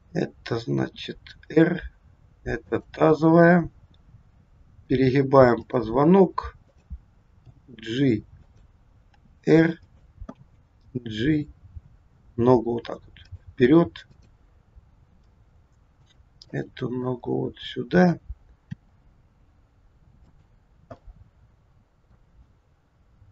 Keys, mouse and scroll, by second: 0.6 r, 3.2 click, 4.4 r, 6.5 click, 7.4 g, 9.1 r, 10.4 g, 14.0 click, 15.0 g, 16.5 middle click, 16.5-16.9 scroll up 1, 17.1-18.0 scroll down 3, 18.8 r, 21.0 middle click, 22.5 scroll up 3.